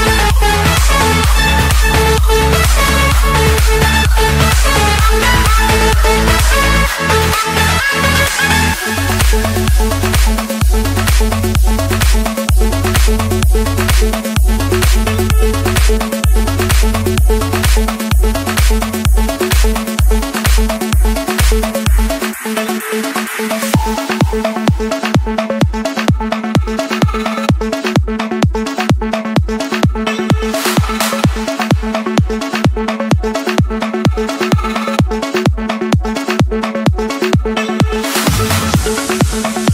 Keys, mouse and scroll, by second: 1.3-2.3 scroll up 4, 2.3 click, 2.8-3.5 scroll down 5, 5.1-6.2 scroll up 6, 6.5 click, 7.1-7.5 scroll down 3, 7.8-8.8 scroll down 1, 9.7 click, 11.2 click, 12.8 click, 13.3-13.8 scroll up 3, 14.3 click, 15.2 scroll down 2, 16.0-17.4 scroll up 15, 18.4 Escape, 18.4 click, 20.5 click, 21.6 click, 22.6-23.7 drag, 23.7 Escape, 24.2-25.1 typing, 26.3 Return, 27.8 click, 28.1 Return, 29.6 typing, 30.6 Return, 32.1-32.8 typing, 33.7 Return, 36.1 click, 37.3-38.6 scroll down 3, 38.6 scroll down 1, 39.2-39.7 scroll down 1.